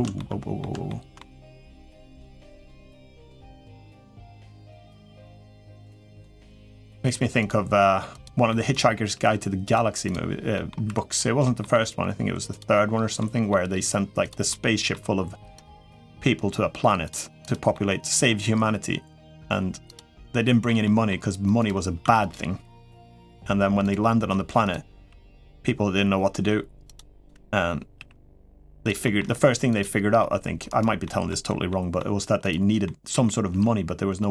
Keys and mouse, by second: 0.6 shift+middle click, 1.2 g, 2.7 g, 3.3 click, 3.6 middle click, 4.7 middle click, 5.1 g, 5.9 click, 6.5 g, 7.2 click, 7.9 g, 8.3 middle click, 9.1 g, 9.9 click, 10.3 middle click, 10.9 click, 10.9 3, 11.2 middle click, 12.0 g, 13.0 middle click, 14.1 click, 14.3 middle click, 15.4 click, 15.8 g, 17.5 middle click, 18.1 g, 19.9 middle click, 20.6 middle click, 21.4 click, 21.8 1, 22.8 middle click, 23.6 click, 24.4 click, 24.8 g, 27.7 g, 28.8 middle click, 29.5 click, 29.8 g, 30.8 middle click, 31.5 middle click, 32.2 click, 32.6 middle click, 33.3 g.